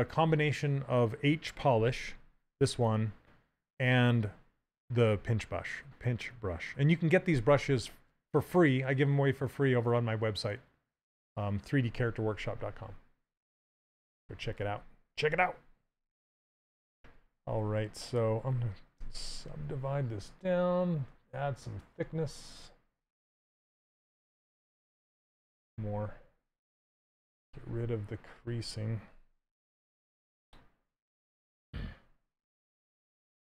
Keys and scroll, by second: 18.7 d, 28.0 2.